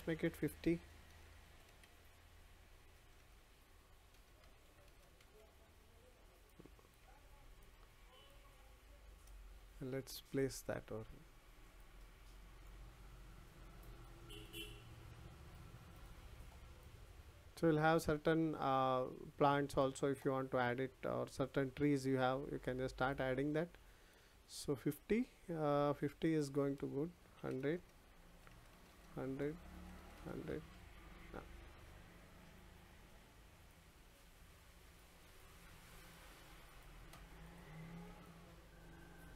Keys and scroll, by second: 4.1 0.